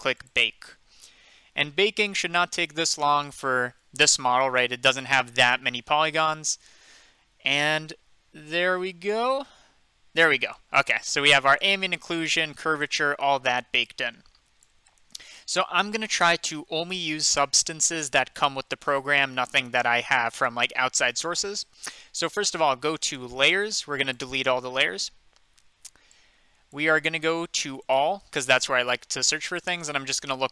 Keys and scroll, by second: 30.3-30.5 typing.